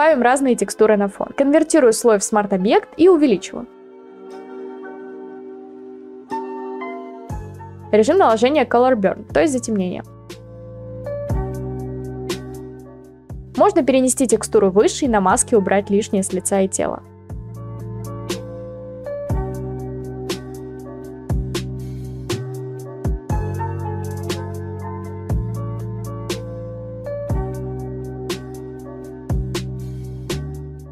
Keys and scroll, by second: 2.3 ctrl+v, 3.9 ctrl+t, 6.4 Return, 23.8 b, 24.5-25.1 ], 25.5 x.